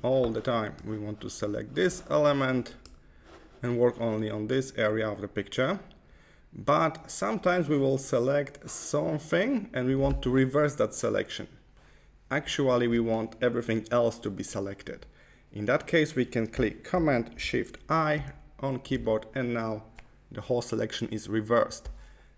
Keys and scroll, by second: 18.0 shift+super+i.